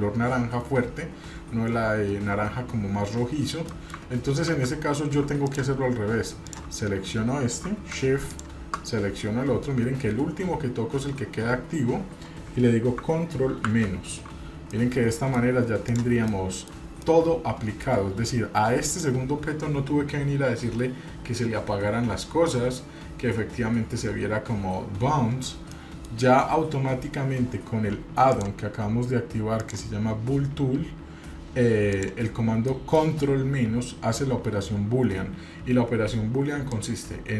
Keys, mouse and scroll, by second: 3.7 middle click, 4.5 ctrl+z, 5.4 click, 6.4 click, 8.3 shift+click, 13.7 ctrl+KP_Subtract, 14.7-15.3 middle drag, 15.8 click, 16.3-16.7 middle drag, 17.1-17.9 middle drag, 18.9 click, 22.1-22.9 scroll up 3, 22.9-23.9 scroll down 4, 23.9-25.2 scroll down 2, 25.7 middle drag, 28.3-30.1 drag, 32.7 middle click, 36.7 click.